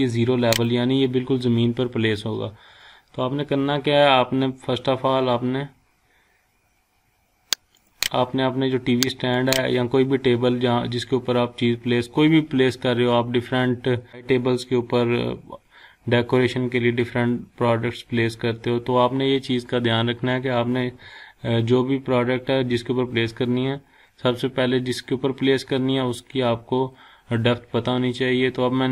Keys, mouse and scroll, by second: 0.0-0.6 drag, 7.7 click, 27.4-27.9 scroll down 1, 28.3 scroll up 1.